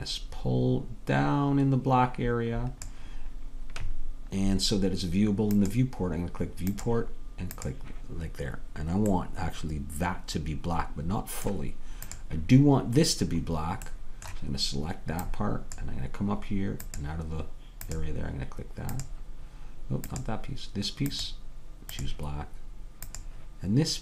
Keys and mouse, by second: 5.9-8.3 right drag, 10.0-11.0 middle drag, 13.6-18.9 drag, 20.1-24.0 drag.